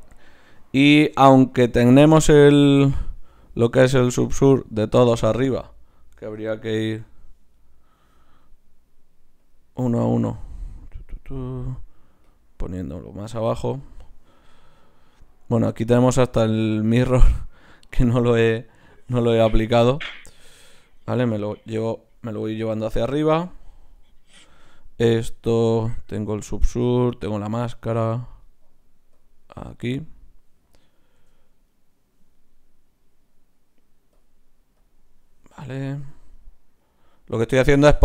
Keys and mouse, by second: 0.5-4.3 right drag, 2.6-7.0 drag, 7.0 h, 7.6-9.5 right drag, 9.4-11.2 drag, 10.6-17.2 right drag, 12.3-14.4 drag, 17.2-19.1 drag, 19.1-22.1 right drag, 20.4-22.1 drag, 22.3 h, 22.6-25.6 right drag, 22.9 h, 23.6 h, 28.0-31.0 drag, 31.3 h, 31.7-33.1 right drag, 34.1 click, 34.1-36.1 right drag, 36.1 click, 36.1 h.